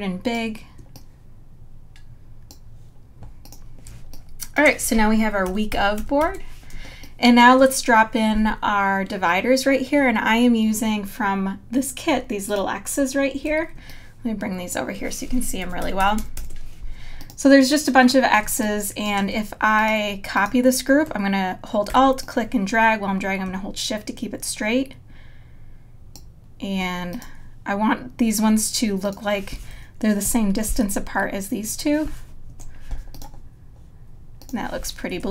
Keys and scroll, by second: 3.9 space, 6.0 super+-, 6.7 space, 15.7 super+=, 18.4 space, 30.3 Right, 32.5 Right, 35.2 Left.